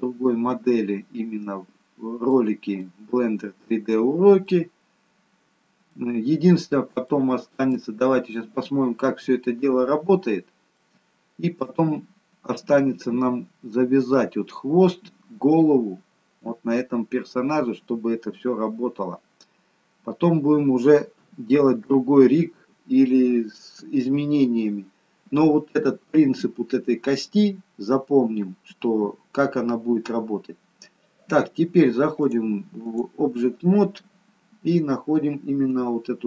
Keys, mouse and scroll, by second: 2.7 middle click, 4.4 middle click, 6.0-6.8 scroll down 2, 7.0 shift+middle click, 7.2 shift+middle click, 10.6 middle click, 21.1 KP_3, 32.2 click.